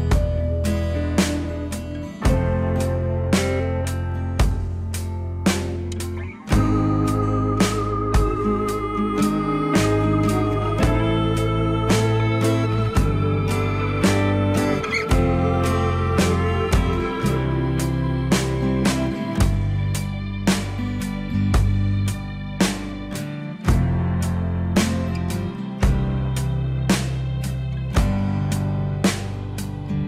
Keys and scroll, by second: 2.9 alt+w, 8.2 F3.